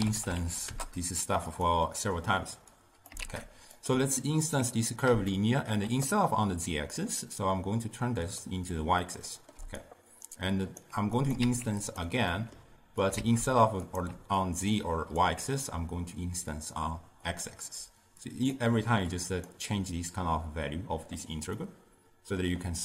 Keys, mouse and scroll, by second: 2.0-2.8 middle drag, 2.8 click, 3.3 shift+d, 4.2-5.4 alt+right drag, 5.4-8.3 shift+middle drag, 8.3 click, 9.1-9.7 middle drag, 9.7 d, 9.9-10.9 right drag, 10.9 d, 11.3 click, 11.5 shift+d, 12.4 middle click, 13.1 click, 13.3 shift+d, 14.5-17.3 alt+right drag, 17.3-18.4 drag, 19.2 click, 21.7-22.8 middle drag.